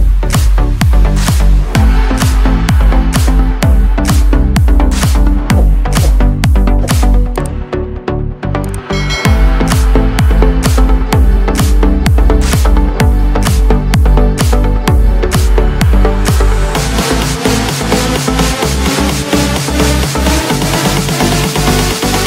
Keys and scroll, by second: 3.2 ctrl+l, 19.2 ctrl+shift+a, 20.3 ctrl+shift+a.